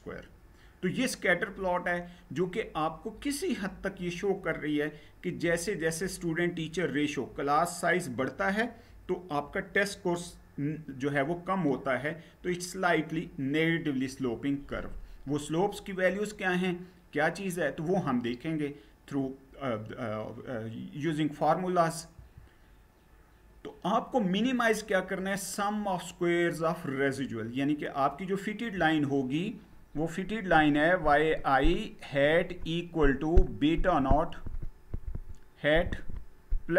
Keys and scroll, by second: 21.8 Down.